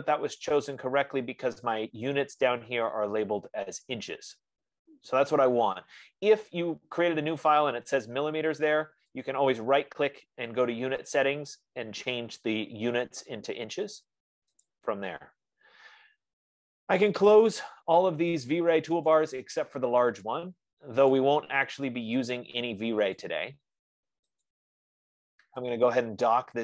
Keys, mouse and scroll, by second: 9.9 right click, 15.0 click, 19.4 click, 20.6 click, 21.5 click, 22.5 click, 23.6 click, 24.8 click.